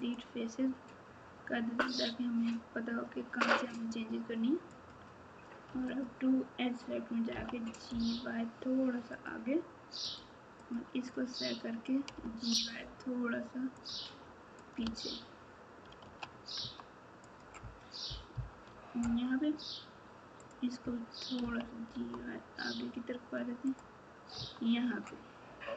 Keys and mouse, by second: 4.7 click, 5.9 click, 7.3 g, 10.5 click, 11.0 click, 12.1 g, 14.6 click, 14.8 alt+z, 16.6 Tab, 17.2 click, 18.3 KP_4, 18.6 Tab, 20.4 click, 21.4 g, 24.3 Tab.